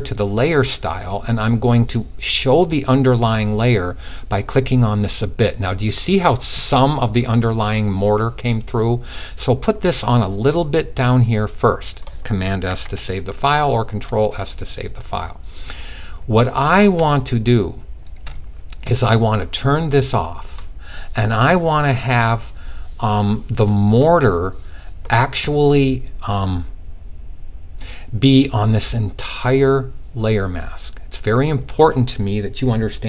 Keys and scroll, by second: 12.1 super+s.